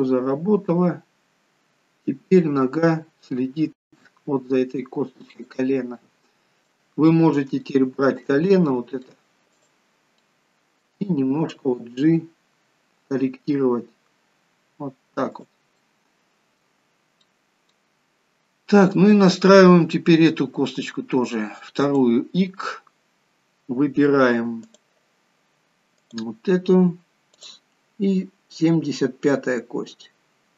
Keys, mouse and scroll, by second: 0.2 middle click, 2.8 g, 6.0 middle click, 7.6 shift+middle click, 8.7 middle click, 9.5 click, 10.2 middle click, 11.5 g, 15.8 middle click, 17.2 middle click, 18.4 scroll up 2, 18.9 middle click, 21.8 click, 22.4 scroll down 1, 24.6 click, 27.4 click.